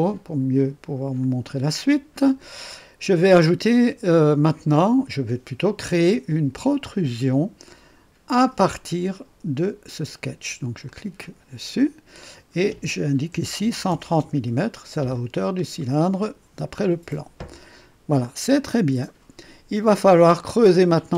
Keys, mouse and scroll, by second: 1.2 click, 3.1-4.9 drag, 5.6 click, 10.8 click, 13.3 KP_1, 13.9 KP_0, 14.2 KP_Enter, 15.3 scroll down 1, 15.7-16.5 right drag, 18.2-21.0 drag.